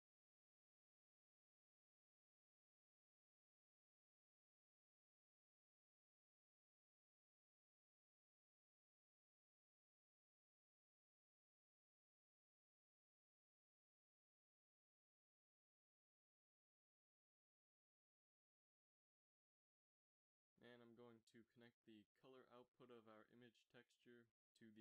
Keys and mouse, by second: 0.2 z, 5.9 click, 6.1 click, 6.3 click, 9.0 z, 9.9 z, 13.0 Tab, 22.0 f, 24.4 click.